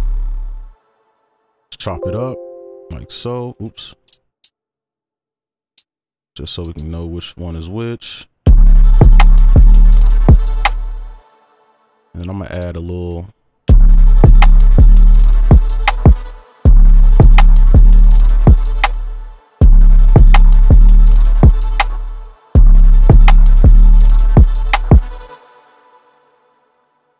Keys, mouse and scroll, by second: 0.8 ctrl+click, 2.2 double click, 3.5 ctrl+z, 3.8 right click, 10.7 space, 11.0 ctrl+click, 12.5 alt+click, 13.7 space, 16.3 space, 16.6 space, 17.3-18.0 shift+scroll down 1, 18.0 right click, 21.9 space, 22.5 space, 25.3 space, 25.7 ctrl+click.